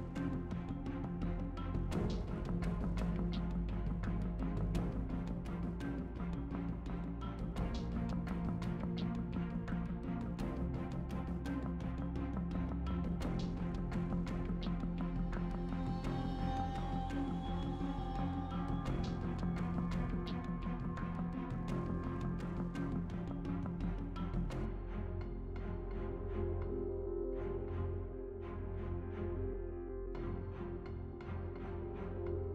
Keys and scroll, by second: 2.5 2, 9.9 3, 11.4 i, 16.2 e, 19.3 i, 24.9 i, 28.5 Tab, 30.2 Tab, 31.4 ctrl+r.